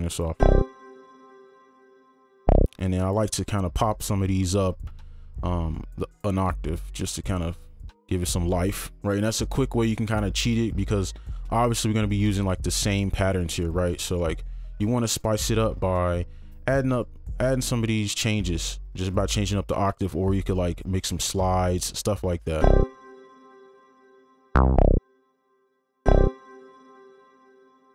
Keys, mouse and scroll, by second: 2.2 space, 2.9 ctrl+click, 3.9-5.9 scroll up 1, 8.6 right click, 11.5 ctrl+click, 14.1 right click, 16.9 ctrl+click, 17.4 ctrl+Down, 17.7 ctrl+Up, 18.1 ctrl+Down, 18.3 ctrl+Up, 18.9 ctrl+Down, 19.2 ctrl+Up, 21.5 double click, 22.3 right click, 25.6 space, 26.8 double click.